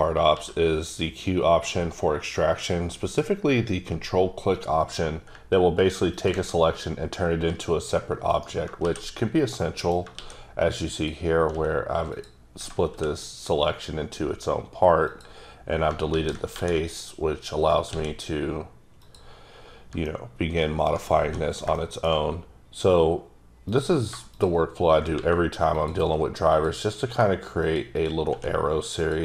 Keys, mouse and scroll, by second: 0.3 q, 5.3 ctrl+q, 6.1 ctrl+click, 7.5 s, 8.8 shift+s, 9.6 middle click, 10.1 shift+s, 10.9 click, 11.5 s, 12.1 click, 12.9 x, 15.0 click, 16.1 ctrl+z, 16.5 2, 17.9 x, 19.0 click, 20.0 middle click, 20.9 scroll down 1, 21.2 1, 21.7 shift+middle click, 22.0-22.3 shift+scroll down 2, 22.3-23.7 scroll up 1, 23.7 click, 25.1 x, 25.7 click, 26.5 click, 27.0 e, 27.6 click, 27.9 click, 28.3 e, 29.0 click.